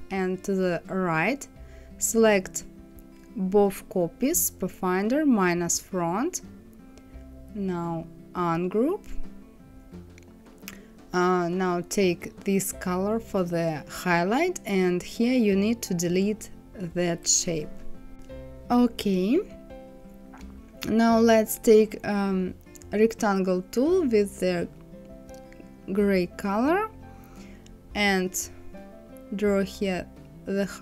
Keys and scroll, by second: 16.0 Delete.